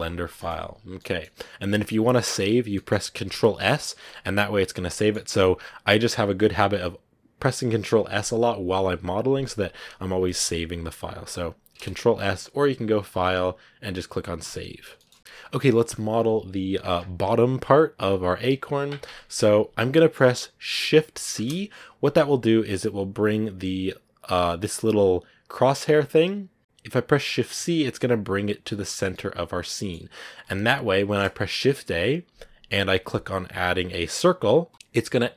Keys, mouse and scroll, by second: 0.0 click, 0.9-4.6 middle drag, 4.6 scroll down 1, 4.8-21.2 middle drag, 21.2 shift+c, 22.1-24.7 scroll down 4, 24.7 click, 25.1 click, 25.5 click, 25.8 click, 27.5 shift+c, 28.7-29.0 scroll down 2, 29.0 middle click, 29.9-30.9 scroll up 3, 30.9 scroll up 1.